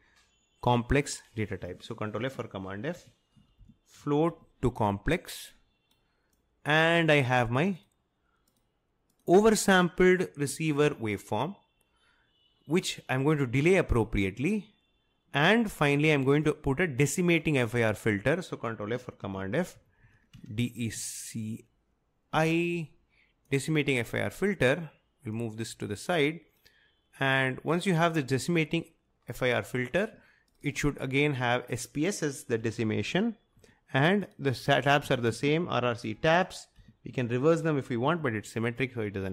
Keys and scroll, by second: 2.2 ctrl+f, 2.7-4.8 typing, 19.3 ctrl+f, 19.7-23.0 typing, 32.4-38.1 typing.